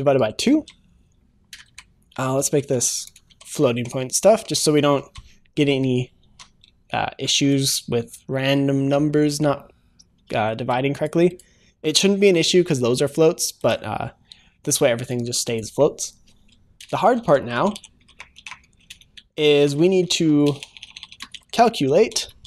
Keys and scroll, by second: 0.5 ctrl+s, 5.0 ctrl+s, 6.4 ctrl+s, 10.2 ctrl+s.